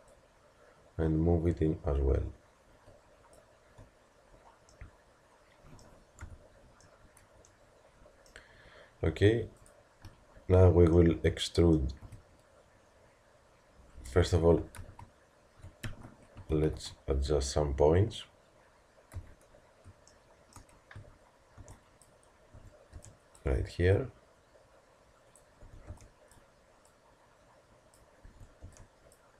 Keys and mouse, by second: 0.1-2.0 drag, 4.9 middle click, 6.2 KP_Decimal, 9.6-11.1 drag, 11.1 middle click, 12.0 e, 16.6 ctrl+z, 18.0 KP_1, 19.2 z, 19.5 middle click, 21.0 a, 25.7 a, 25.9 b, 27.0 click, 28.3 a, 28.8 b.